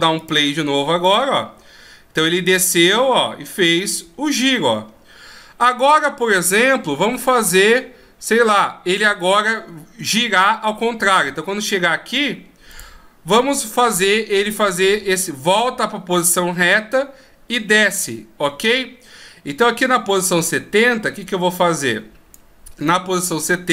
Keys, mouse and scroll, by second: 0.5 click, 1.3 click, 13.0 click, 19.9 click, 23.2 middle click.